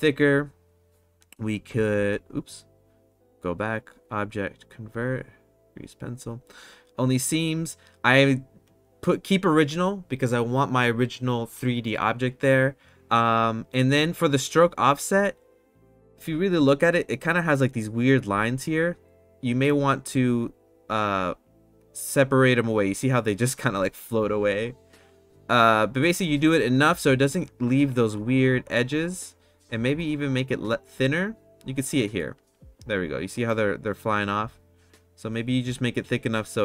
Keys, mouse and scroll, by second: 1.7 ctrl+z, 3.7-5.9 drag, 16.5 middle click, 17.3 middle click, 20.1 click, 20.5 click, 21.6-27.2 drag, 28.1 click, 28.4 click, 28.6 click, 28.7 click, 28.9 click, 29.2 click, 30.0-31.2 drag, 31.9-32.2 middle drag, 35.0 click, 35.2 click, 35.5 click, 35.7 click, 35.8 click, 35.9 click.